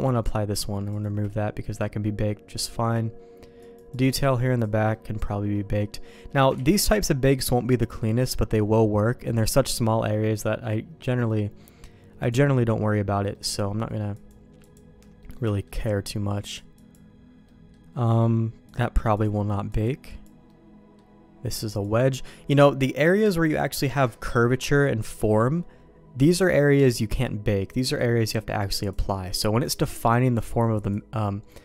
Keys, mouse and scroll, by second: 2.2 middle click, 2.7 middle click, 3.5 click, 3.9 click, 4.8 middle click, 5.7 middle click, 6.0 middle click, 6.5 ctrl+z, 10.0 middle click, 12.6 middle click, 13.3 middle click, 14.1 click, 14.6 click, 15.1 middle click, 15.4 shift+middle click, 16.4 click, 16.7 click, 17.4 middle click, 18.7 click, 19.6 click, 20.0 click, 20.4 middle click, 21.5 click, 21.8 click, 28.5 click, 28.8-30.1 drag, 30.7 click.